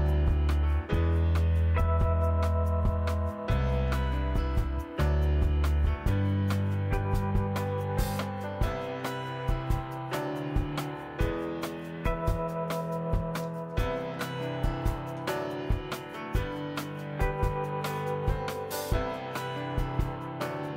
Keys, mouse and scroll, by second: 0.3 click, 0.3 scroll up 1, 1.3 click, 1.8 click, 2.8 click, 3.4 click, 4.7 KP_1, 5.4-6.0 scroll up 2, 6.0-6.4 shift+middle drag, 6.7 click, 7.9 click, 8.9 click, 9.5-10.7 drag, 11.1 click, 11.7 click, 12.8 click, 13.6-14.7 drag, 15.6 click, 16.3 click, 17.4 click.